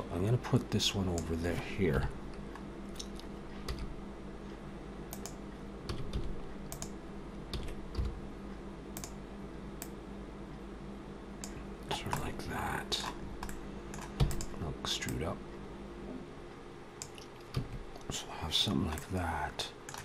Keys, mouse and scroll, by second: 1.7 KP_7, 2.5 scroll up 1, 3.5 s, 5.7 s, 7.4 s, 9.6 click, 11.7 scroll down 2, 12.0 middle click, 13.0-13.9 scroll up 2, 13.3 middle click, 13.9 e, 14.9 click, 17.4 a, 18.8 middle click.